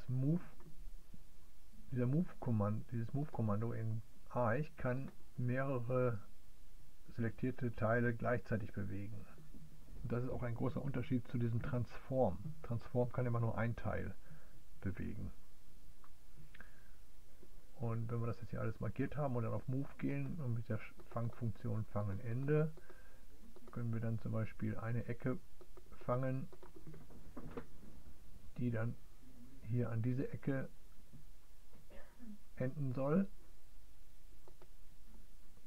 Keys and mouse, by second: 5.0-20.3 drag, 21.7 click, 22.5 click, 24.3 click, 26.6-34.7 drag.